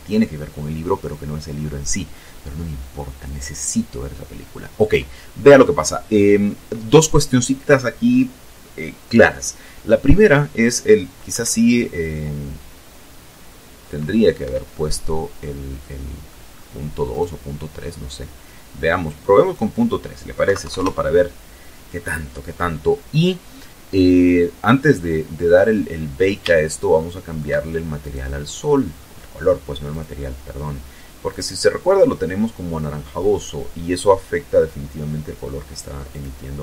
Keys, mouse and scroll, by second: 10.9-11.7 scroll up 2, 12.0 Escape, 13.4 middle click, 14.8 right click, 17.0 click, 18.0 KP_Decimal, 18.2 KP_3, 18.4 KP_Enter, 22.0-22.4 scroll down 2, 22.9 scroll down 2, 24.1-25.1 shift+middle drag, 25.6 right click, 27.6 click, 28.9 click, 33.7 click.